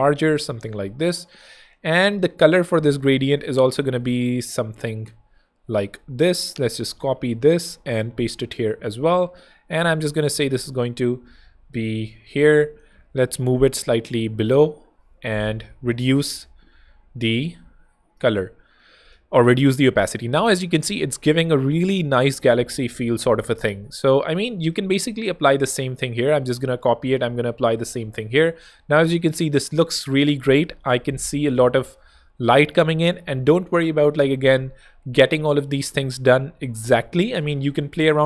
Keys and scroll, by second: 7.0 super+c, 8.7 super+Tab, 9.5 Tab, 12.0 shift+Escape, 12.8 shift+super+Escape, 13.1 super+[, 14.5 super+], 14.9 super+1, 15.3-16.9 typing, 17.8 Escape, 20.9 super+space, 21.8 space, 25.3 super+c, 27.1 super+v.